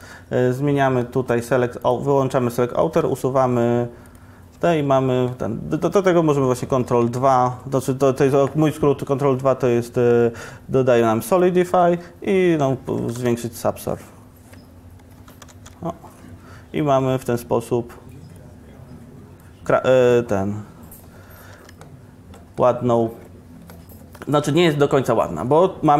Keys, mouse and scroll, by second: 0.0 middle click, 0.1-3.0 drag, 3.0 x, 4.6 Tab, 6.7 ctrl+2, 12.8 ctrl+1, 13.0 ctrl+1, 15.4 ctrl+1, 18.9 ctrl+1, 21.5 Tab, 21.7 Tab, 24.5 Tab.